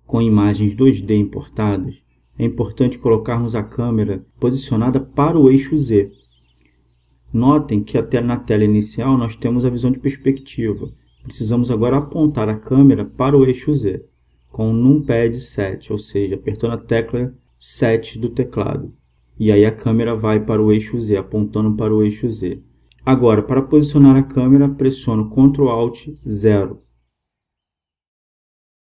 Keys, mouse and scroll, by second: 15.9 KP_7, 24.5 ctrl+alt+KP_0.